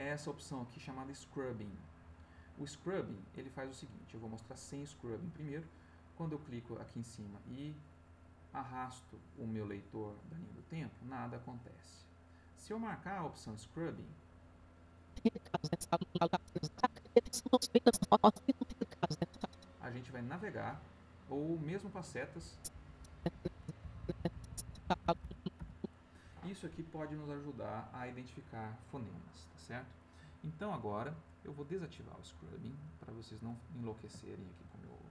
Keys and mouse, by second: 7.3-12.1 drag, 12.8 click, 13.9 click, 14.9-19.4 drag, 22.3 Left, 23.8 Right, 31.3 click, 32.4 click, 33.7 middle click, 34.3 ctrl+middle click, 34.8 ctrl+middle click.